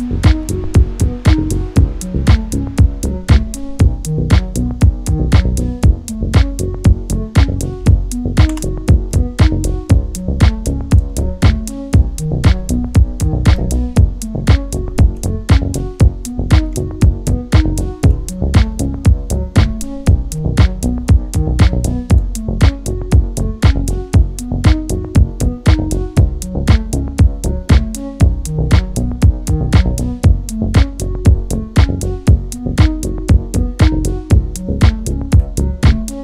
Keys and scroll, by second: 7.8 space.